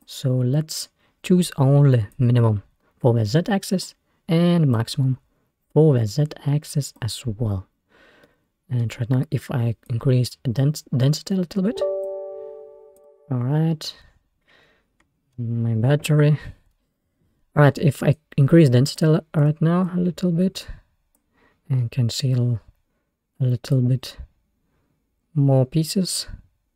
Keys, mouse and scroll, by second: 2.2-7.6 drag, 7.8-8.3 scroll down 1, 8.3 middle click, 9.0-9.6 scroll up 1, 9.6 scroll up 1, 9.9-12.3 drag, 19.5-21.5 drag, 21.5-21.8 scroll down 3, 21.8-22.5 scroll up 3, 22.5-23.2 scroll up 2, 23.8-26.7 drag.